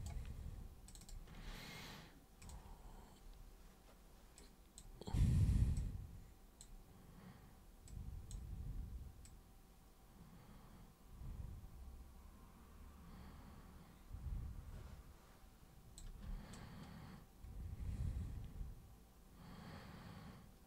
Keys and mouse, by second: 0.8 super+click, 2.4 super+click, 4.4 super+click, 5.8 super+click, 7.9 super+click, 9.2-15.9 super+drag, 16.5-20.6 alt+super+drag.